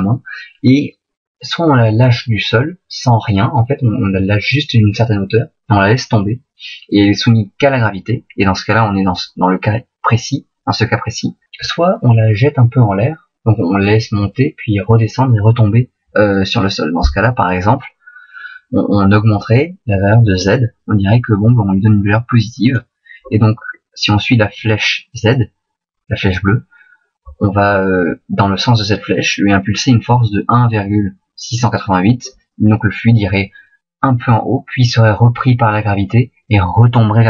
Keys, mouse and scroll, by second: 23.4 click.